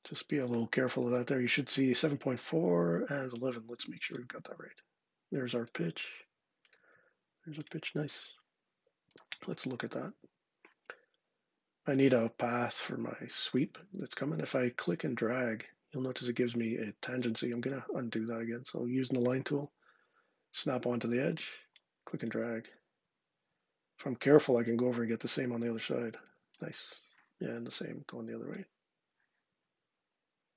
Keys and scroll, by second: 17.2 Escape, 19.0 l.